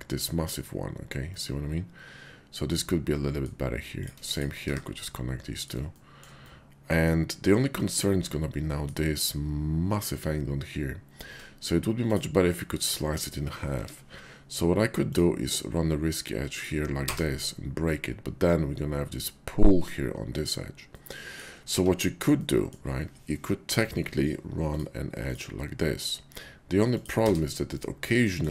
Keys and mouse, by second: 1.3-3.5 middle drag, 3.8 click, 4.9 middle click, 4.9 1, 6.4 middle click, 7.7-8.9 middle drag, 11.3 Tab, 11.9 click, 13.7 k, 20.8 middle click, 21.7 ctrl+z, 22.4 middle click, 23.6 k, 27.8 middle click.